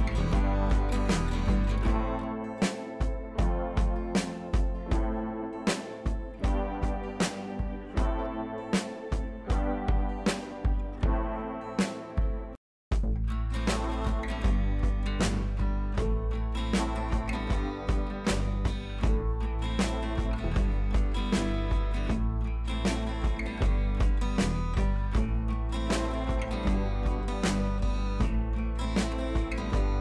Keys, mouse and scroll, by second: 0.4 alt+scroll down 1, 2.3-3.1 shift+drag, 4.0 alt+scroll up 1, 5.0-5.8 shift+drag, 11.7-12.7 drag, 13.8-14.6 drag, 16.5 click, 18.8 click, 23.3 ctrl+[, 24.2 click, 24.2 click, 25.4 ctrl+[, 28.0 alt+scroll up 1, 29.0-29.8 drag.